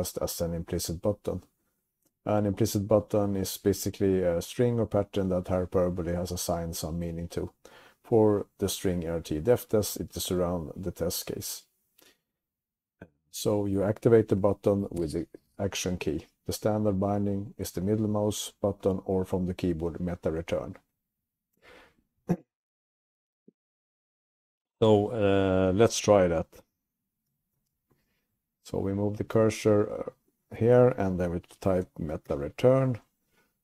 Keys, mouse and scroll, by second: 27.5 Down, 27.5 Tab, 27.5 Up, 27.5 click, 27.5 scroll down 1, 29.0 scroll up 1, 29.0 Up, 29.2 Up, 29.4 Right, 29.7 Right, 30.0 Right, 30.2 Right, 30.6 Right, 32.7 alt+Return.